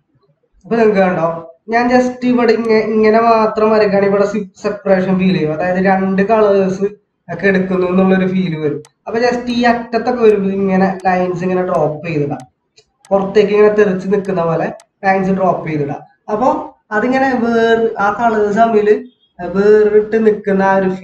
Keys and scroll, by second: 1.1 ctrl+-, 1.1 ctrl+-, 1.9 ctrl+=, 15.5 ctrl+-.